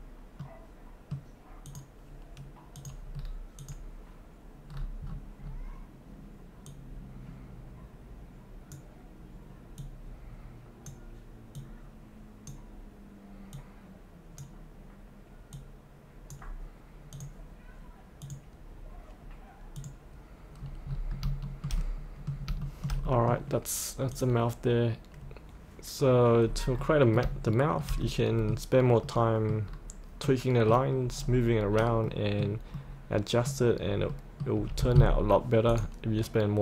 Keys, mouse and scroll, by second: 0.4 middle click, 1.7 click, 3.2-3.6 scroll down 1, 3.6 click, 4.9-6.8 scroll down 1, 6.8-13.5 drag, 21.7 shift+middle click, 22.7 shift+middle click, 24.1 click, 26.5-26.9 scroll up 1, 26.9 middle click, 27.5 shift+middle click, 28.1 middle click, 29.7-30.3 scroll down 2, 30.3 middle click, 31.2-31.6 scroll down 1, 31.6-32.1 scroll up 1, 32.1 middle click, 33.9 scroll up 1, 34.1 middle click, 35.7 click, 36.2-36.6 scroll down 1.